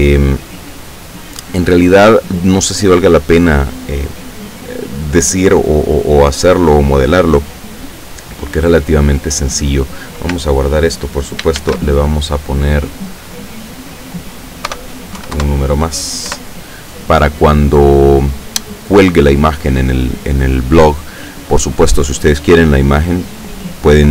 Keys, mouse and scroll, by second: 11.6 ctrl+shift+s, 12.9 click, 13.3 click, 14.7 BackSpace, 15.2 KP_5, 15.4 KP_Enter, 16.4 KP_Enter, 18.4 click.